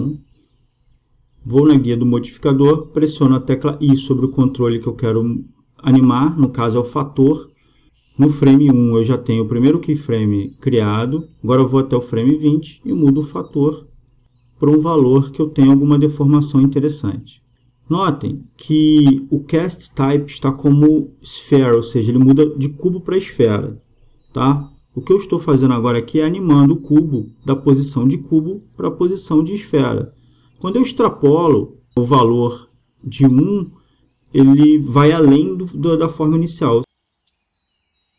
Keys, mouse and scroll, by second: 3.2 i, 11.8-13.7 drag, 14.0-15.8 drag, 19.9-21.6 drag, 22.0-23.9 drag, 25.3-27.0 drag, 29.0-30.9 drag, 31.9 middle click, 37.4-38.1 drag.